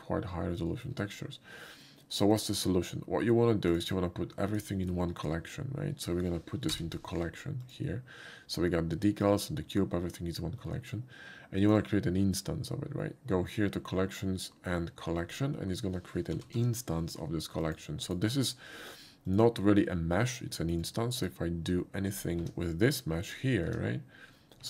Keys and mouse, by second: 0.8 shift+middle click, 2.4 shift+click, 3.7 click, 4.6 shift+click, 4.9 shift+click, 6.7 m, 7.7 click, 11.7 click, 15.3 click, 16.8 y, 17.7 click, 18.1 click, 19.3 click, 20.7 middle click, 21.2 shift+click, 22.2 shift+click, 22.4 Tab, 23.3 click.